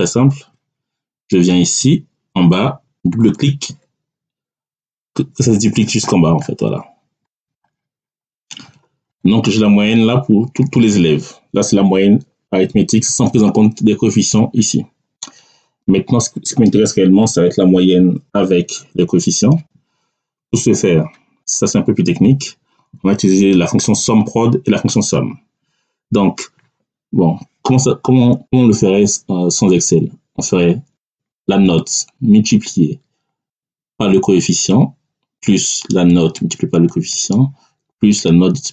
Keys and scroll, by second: 0.4 Tab, 10.6 Down.